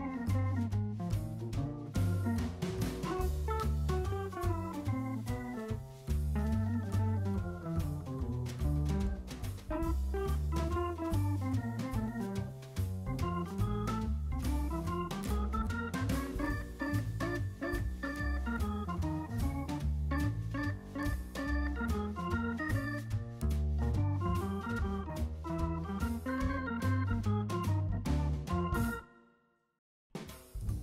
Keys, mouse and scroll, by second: 2.5 typing, 3.2-3.5 scroll up 1, 4.2-5.9 typing, 4.7 middle click, 6.4 middle click, 7.6 scroll down 1, 7.8 middle click, 8.7 scroll up 1, 8.9 middle click, 9.9-10.3 scroll down 1, 10.3 middle click, 10.6 shift+middle click, 10.8 shift+scroll down 1, 11.0 middle click, 11.2 shift+middle click, 11.6 scroll down 1, 12.1-12.5 scroll up 1, 13.1 scroll down 1, 14.1-20.3 typing, 14.4 scroll up 1, 15.3-15.7 scroll up 1, 21.6-22.0 scroll down 1, 22.0-24.5 typing, 25.6 scroll up 1, 25.8 middle click, 26.5-27.2 typing, 27.8-28.3 scroll down 1, 28.7 middle click, 28.9 shift+middle click, 29.6 middle click.